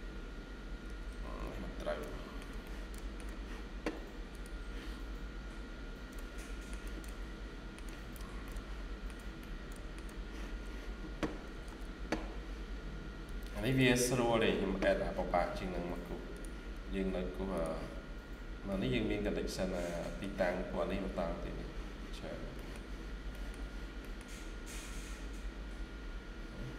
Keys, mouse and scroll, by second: 0.7 Escape, 1.0 Escape, 1.3-1.9 scroll down 1, 1.9 middle click, 2.5 middle click, 2.5 shift+scroll down 1, 5.5 scroll down 1, 6.1 shift+middle click, 8.3 middle click, 9.3 middle click, 11.5 ctrl+s, 18.0-18.5 scroll down 1, 18.5 scroll down 1, 18.6 middle click, 20.5-21.3 scroll up 1, 22.1 scroll down 1, 22.4 middle click, 23.2-23.8 scroll down 2, 23.2 middle click, 23.9 middle click, 24.7 scroll up 1.